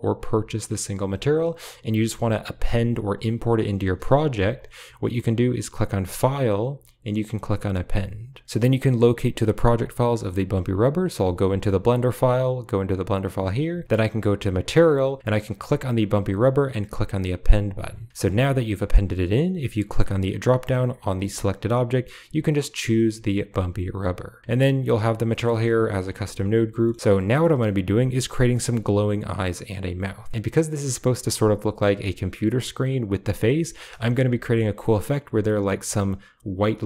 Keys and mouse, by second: 4.2 g, 6.1-8.4 drag, 11.0 click, 12.3 click, 14.3 click, 15.6 click, 17.3 click, 18.4 click, 20.5 click, 24.4 click, 25.2 middle click, 26.7 middle click, 27.3 shift+middle click, 28.5 shift+middle click, 31.7 click, 33.9 shift+middle click, 34.3 shift+middle drag.